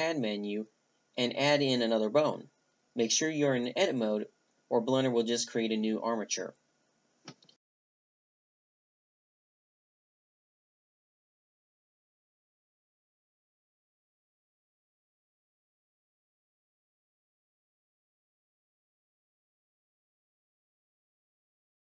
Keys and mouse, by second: 0.4 shift+c, 0.9 click, 3.3-3.8 drag, 4.9 click, 7.2 right click, 7.6 Delete, 9.1-10.2 right drag, 11.1-13.5 middle drag, 13.5-14.1 right drag, 13.6 g, 14.1 right click, 15.1 r, 18.5 s, 20.1 g.